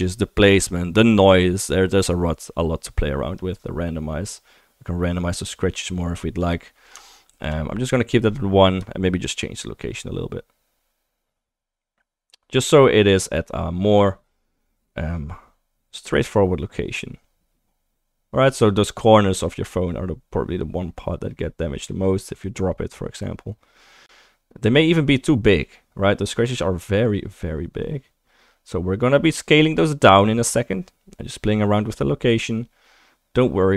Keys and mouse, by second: 3.4-4.9 drag, 3.4-4.9 middle drag, 5.3 click, 5.3 middle click, 5.3 right click, 7.3 ctrl+z, 10.7-18.0 shift+middle drag, 18.5-33.7 shift+middle drag.